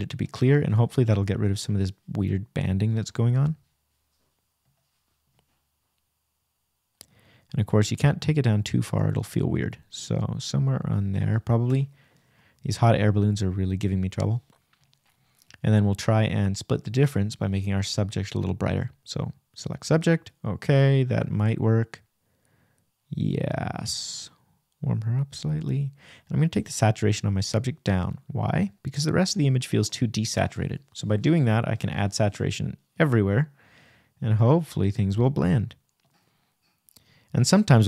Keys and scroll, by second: 4.4 Return, 5.0 shift+Return, 5.1 shift+-, 6.0 shift+=, 22.6 Return, 31.2 shift+=, 31.9 shift+-, 36.3 super+z.